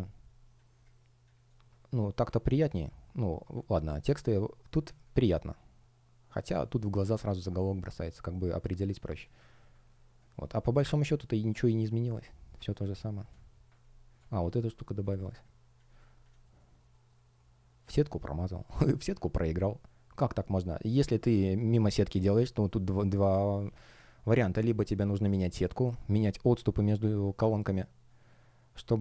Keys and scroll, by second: 2.1 space, 9.8 space, 13.7 space, 16.4 shift+o, 16.8 shift+g.